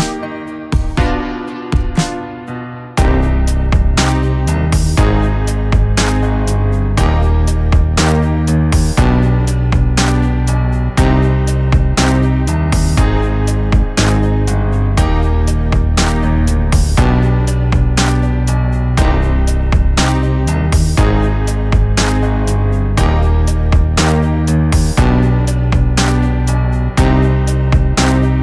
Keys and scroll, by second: 0.3 Down, 1.2 Down, 1.4 Down, 1.5 Down, 1.8 Down, 2.1 Down, 2.4 Down, 2.9 Up, 3.2 Return, 6.0 Up, 6.4 Up, 6.6 Up, 6.9 Up, 7.8 Up, 8.5 Up, 8.8 Return, 11.0 Up, 11.4 Up, 11.5 Return, 13.2 Down, 13.6 Down, 14.0 Return, 16.0 Up, 17.7 Left, 18.0 Left, 18.3 Down, 18.7 Left, 20.5 Up, 21.0 Return, 23.2 u, 23.3 u, 27.6 ctrl+=.